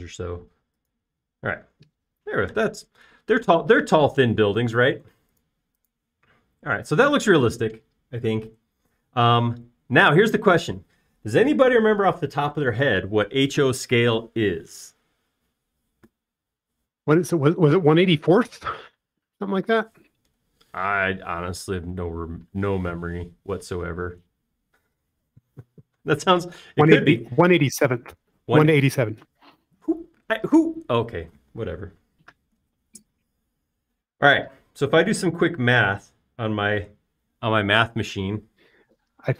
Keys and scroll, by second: 0.0 6, 0.3 shift+', 0.6 Return, 1.4 space.